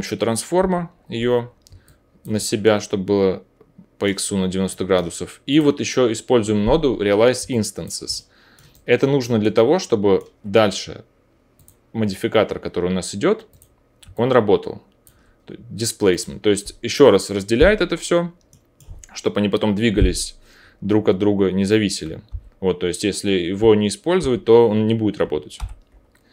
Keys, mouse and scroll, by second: 0.5 o, 1.8-5.5 alt+middle drag, 3.6-7.4 drag, 3.6-5.5 right drag, 7.4-10.4 alt+middle drag, 11.6-13.4 drag, 13.5 click, 22.2 m, 23.5-25.5 drag, 23.5-26.3 middle drag, 23.5-25.5 right drag, 23.5 m, 24.1 m, 25.5 m.